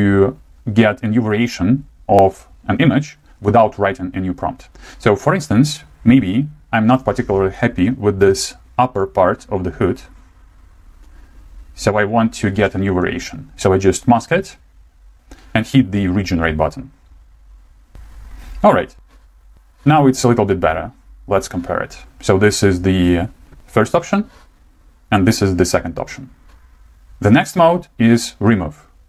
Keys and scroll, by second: 7.7 [, 7.8 [, 8.0 [, 8.2 [.